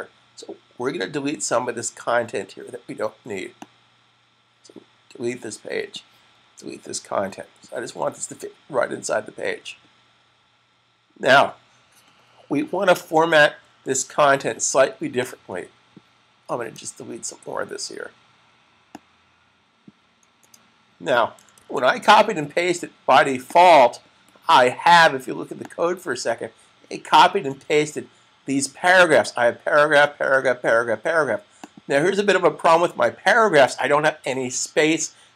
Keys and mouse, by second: 3.3 click, 15.3 click, 18.8 click, 20.3 click, 21.5 super+s, 23.3 click, 28.9 click.